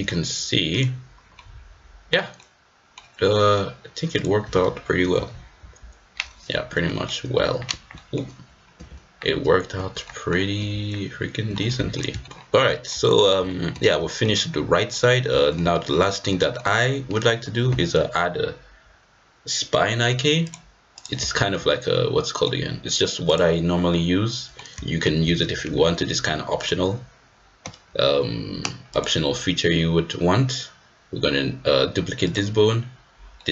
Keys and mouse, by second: 1.3-2.1 middle drag, 2.3-2.9 middle drag, 5.3 g, 6.8 middle click, 6.9 click, 7.2 g, 7.9 drag, 8.8 g, 10.0 middle drag, 10.5 g, 11.6-12.0 middle drag, 12.2 shift+middle click, 12.7 shift+middle drag, 13.5 shift+middle click, 14.0 shift+middle click, 14.9 middle drag, 15.4 shift+middle drag, 15.7-16.3 middle drag, 16.4 middle drag, 20.4-21.0 drag, 21.4 shift+middle click, 21.9 middle click, 23.2 click, 23.9 middle click, 25.0 shift+d, 29.0-30.0 drag, 33.4 middle click.